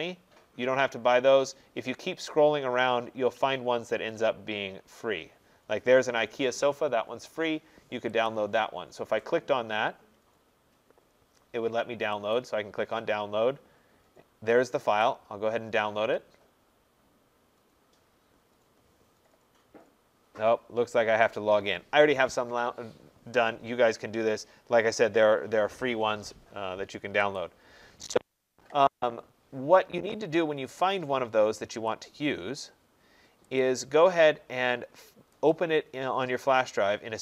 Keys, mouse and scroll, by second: 2.6 middle click, 8.2 click, 12.4 click, 15.0 click, 27.4 click, 31.9 click, 33.7 click, 33.8 click, 35.5 click.